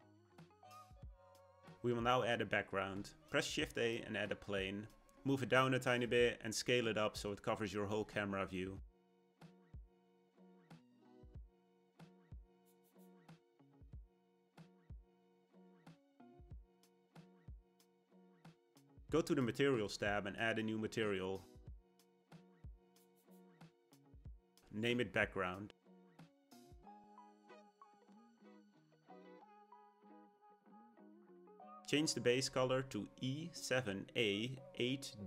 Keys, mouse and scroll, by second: 1.7 shift+a, 6.1 g, 9.1 s, 12.1 g, 13.2 s, 18.9 click, 20.6-24.0 drag, 24.5-27.5 drag, 28.1 click.